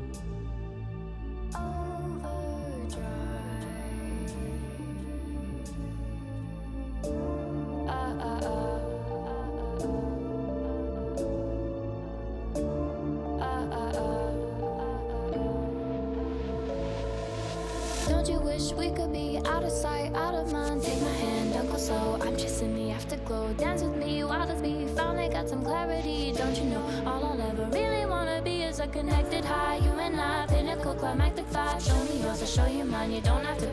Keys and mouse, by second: 3.2 s, 3.5 s, 3.9 shift+click, 4.7 s, 6.2 z, 6.3 z, 6.8 click, 7.9 g, 9.7 y, 9.9 y, 10.6 click, 11.5 g, 14.6 middle drag, 14.9 click, 14.9 right click, 15.7 g, 19.5 KP_1, 21.3 shift+click, 21.9 g, 24.0 z, 24.1 z, 26.3 Tab, 26.5 a, 26.8 click, 27.9 s, 29.6 Tab, 29.6 y, 30.2-30.6 drag, 30.9 shift+click, 31.2 Tab, 31.7 a, 32.3 KP_1, 33.0 shift+click.